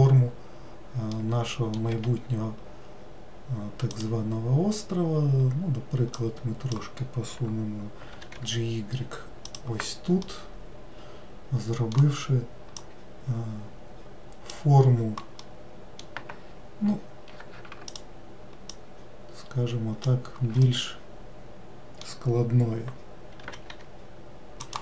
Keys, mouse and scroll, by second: 1.1 middle click, 1.9 1, 3.9 click, 6.2 click, 8.1 g, 10.2-12.7 middle drag, 12.7 click, 15.4-17.9 middle drag, 17.9-18.9 ctrl+drag, 20.7-23.4 middle drag, 23.4 g.